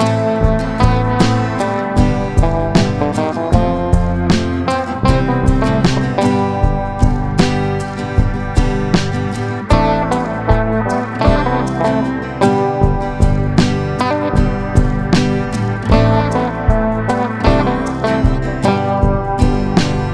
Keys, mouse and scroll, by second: 0.7 click, 5.0 ctrl+s, 7.5-8.5 drag, 9.0 ctrl+z, 10.8 click, 17.5-20.1 shift+drag.